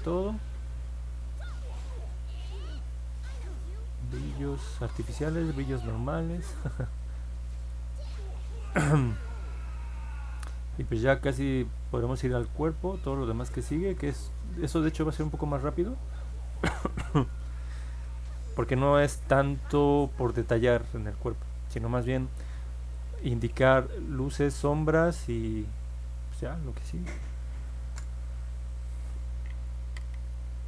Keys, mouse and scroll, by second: 8.0 middle click, 8.7-12.3 alt+drag, 13.8-15.1 alt+drag, 15.4 middle click, 15.9 middle click, 17.0-18.9 alt+drag, 19.2 middle click, 19.8 middle click, 21.2 alt+middle click, 21.9 alt+click, 24.1 click, 25.5 click.